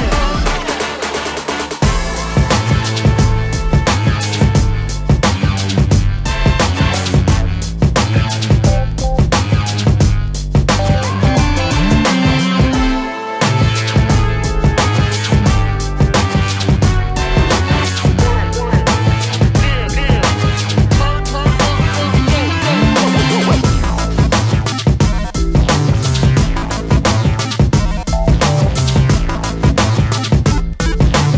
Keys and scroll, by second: 11.6 space, 11.7 Escape, 13.4 shift+space.